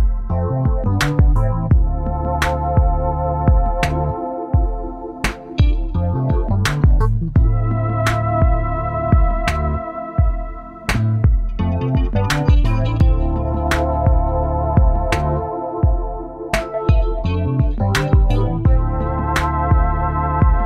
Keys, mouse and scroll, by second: 0.0-2.0 typing, 4.2 Right, 5.1 Delete, 5.3 Delete, 5.5 Delete, 5.7 Delete, 5.9 Delete, 6.2 Delete, 6.6 Delete, 7.7 ctrl+v, 11.3 Left, 11.5 Left, 11.7 Left, 11.9 Left, 12.1 Left, 12.3 Left, 12.5 Left, 13.0 Return.